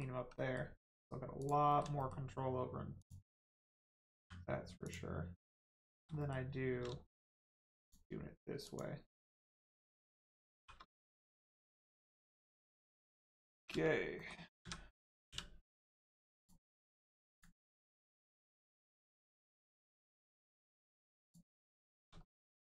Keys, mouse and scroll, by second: 1.3 click, 1.6 middle click, 1.9 shift+middle click, 2.9 shift+click, 4.8 click, 5.6 click, 5.8 middle click, 6.1 shift+middle click, 7.7 shift+click, 10.5 shift+r, 11.1 Tab, 11.5 middle click, 11.9 Tab, 12.4 middle click, 12.8 scroll down 1, 13.7 ctrl+space, 14.1 middle click, 14.5 a, 15.2 u, 16.3 click, 16.9-17.3 scroll up 1, 17.3 click, 18.9 shift+middle click, 19.9-20.3 scroll up 1, 20.5 shift+middle click, 21.2 click, 21.5 middle click, 21.9 shift+middle click, 22.2 middle click, 22.6 scroll up 1.